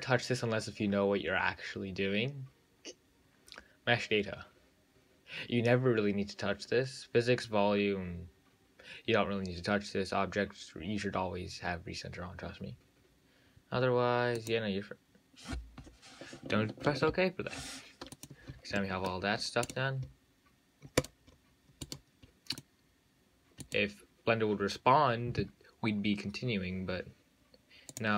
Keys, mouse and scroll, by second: 17.2 ctrl+z.